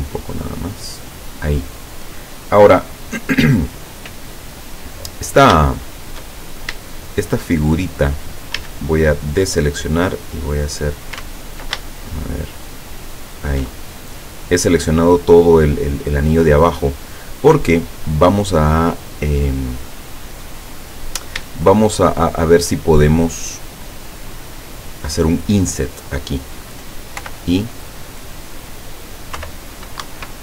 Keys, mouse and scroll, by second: 1.1 click, 6.3 shift+middle click, 6.5-6.8 shift+scroll up 3, 6.8 shift+middle click, 8.6 a, 10.5 click, 12.0 ctrl+alt+shift+right click, 12.5 ctrl+alt+shift+right click, 17.2 scroll up 2, 17.6 scroll down 2, 18.9 middle click, 20.3-21.3 middle drag, 21.7-22.7 shift+middle drag, 27.2 i, 29.4 F6, 30.1 Escape.